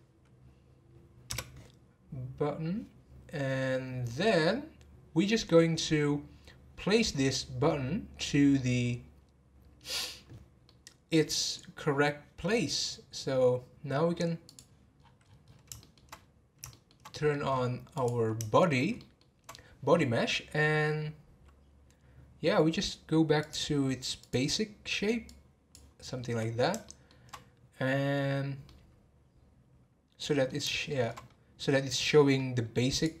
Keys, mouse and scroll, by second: 8.1-13.1 middle drag, 13.1-14.4 scroll down 1, 14.4 click, 15.0-15.5 scroll down 10, 15.8-16.1 shift+middle drag, 16.7-17.5 shift+middle drag, 17.5 scroll up 1, 17.9 click, 19.0-22.0 shift+middle drag, 23.4 click, 24.2 click, 25.3 click, 26.1-26.9 scroll down 2, 26.9-31.2 shift+middle drag, 31.2-31.7 scroll up 1, 31.7-32.9 scroll up 1, 32.9 click.